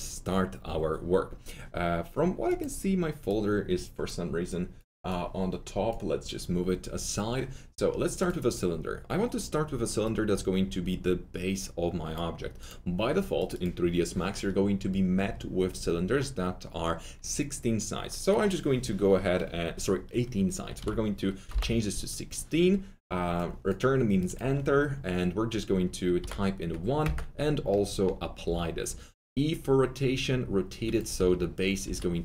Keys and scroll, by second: 20.6-21.4 typing, 26.1-27.0 typing, 28.4 e, 31.1 F3, 31.8 F3.